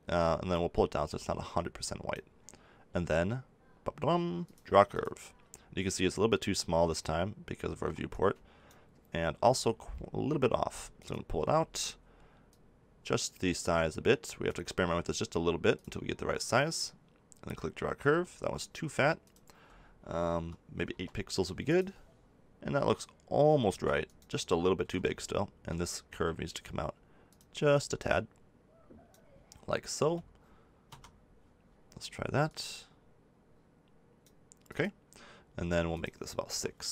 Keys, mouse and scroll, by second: 4.4-6.0 drag, 7.7 ctrl+z, 9.4 g, 18.0 ctrl+z, 21.6-23.6 drag, 23.6 ctrl+z, 24.8 g, 27.3-28.9 drag, 29.2 click.